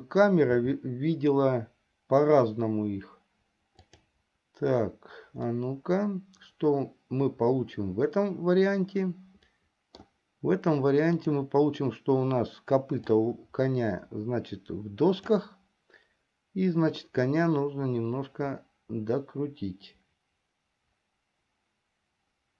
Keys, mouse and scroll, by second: 1.2 g, 6.0-10.4 middle drag, 11.7 click, 13.5-16.2 drag, 17.6-22.5 drag.